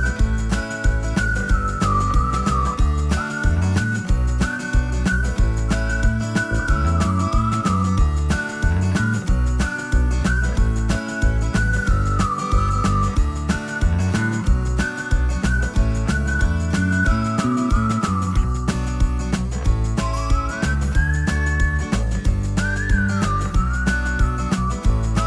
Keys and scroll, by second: 1.8 Escape, 14.9 Escape.